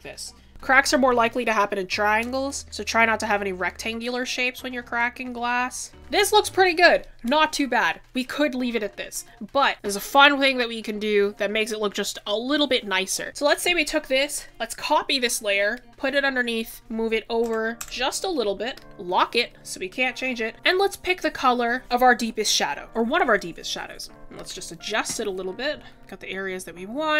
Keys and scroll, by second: 0.5 ctrl+z, 1.8 ctrl+z, 2.9 ctrl+z.